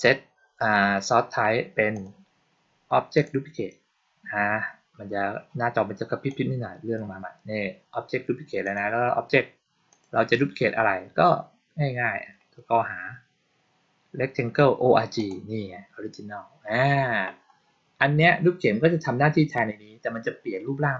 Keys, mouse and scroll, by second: 1.8 click, 3.0 click, 6.2 click, 8.5 click, 9.8 click, 11.8-12.6 scroll down 2, 12.7-14.2 scroll down 4, 15.0 click.